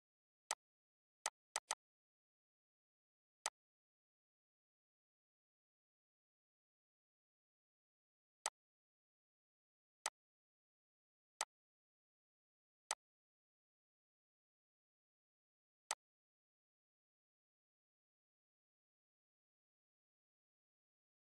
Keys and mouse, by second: 8.1 click, 15.5 click.